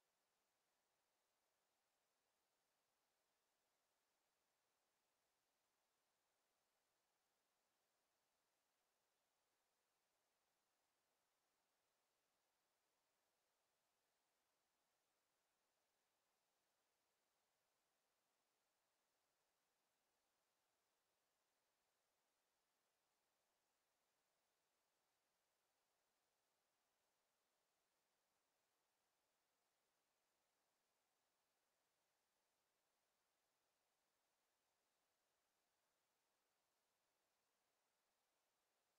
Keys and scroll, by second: 19.7 ctrl+z.